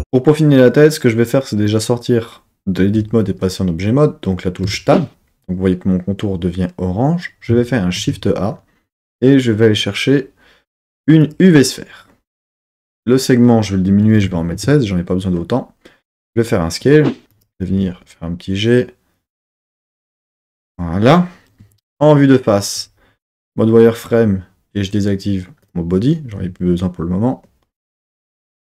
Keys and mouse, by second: 4.6 Tab, 7.9 shift+a, 12.8-14.6 drag, 16.2 s, 17.3 click, 17.6 g, 21.6 KP_1, 22.7 z, 25.6 click.